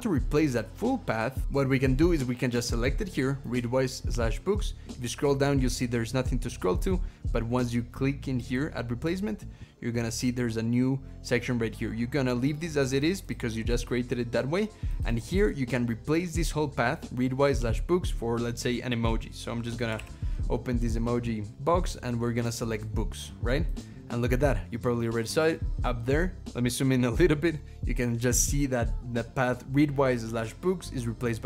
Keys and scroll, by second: 19.8 super+., 26.4 ctrl+=.